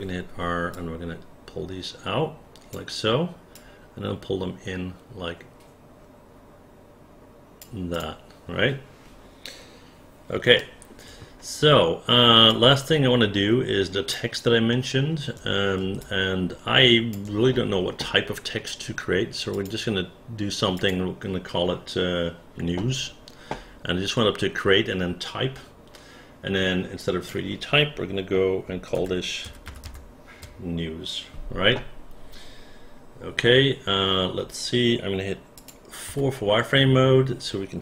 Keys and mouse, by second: 0.7-2.7 drag, 3.5-7.6 drag, 7.9-10.3 drag, 10.5 alt+middle click, 12.5-14.1 alt+drag, 14.7 alt+middle click, 16.0-17.1 alt+drag, 27.0 click, 28.9 shift+n, 29.4 shift+e, 29.7 shift+w, 29.8 shift+s, 35.5 click, 36.1 4.